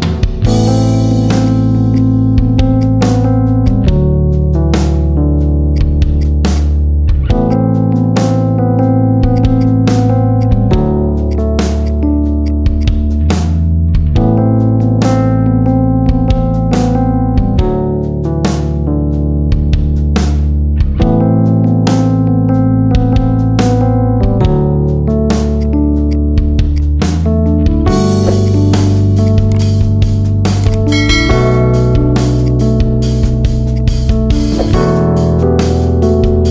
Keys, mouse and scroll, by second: 1.3 click, 1.9 click, 5.7-7.1 right drag, 7.1-7.4 scroll down 2, 7.4 click, 7.6-8.2 middle drag, 8.2 scroll up 2, 8.5-9.3 middle drag, 9.3 click, 9.5 click, 10.3 click, 11.2 click, 11.7-12.7 drag, 13.1 click, 13.6-15.7 middle drag, 15.7-16.1 scroll down 1, 16.1-17.6 middle drag, 22.7-24.6 middle drag, 24.6-25.1 scroll down 1, 25.1-25.5 middle drag, 25.5 click, 26.0 click, 26.7 click, 26.9 middle drag, 27.1 scroll down 3, 27.3-27.9 middle drag, 27.9 g, 29.5 r, 30.7-31.5 middle drag, 31.5 r, 32.7 r, 33.8-34.3 middle drag, 34.3 g, 34.9-35.2 middle drag, 35.2 scroll down 2, 35.5 middle drag, 35.7-36.5 scroll up 7.